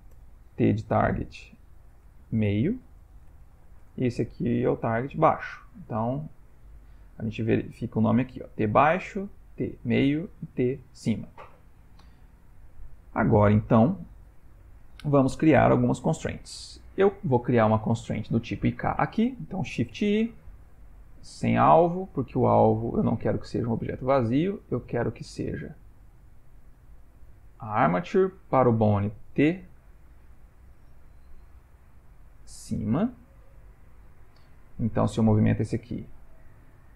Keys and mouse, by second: 5.1 click, 9.2 click, 10.4 click, 12.2 ctrl+middle click, 13.0 shift+middle click, 15.7 Tab, 17.3 click, 19.9 shift+i, 22.0 click, 22.3 click, 25.8 click, 27.6 click, 34.9 click, 35.4 g.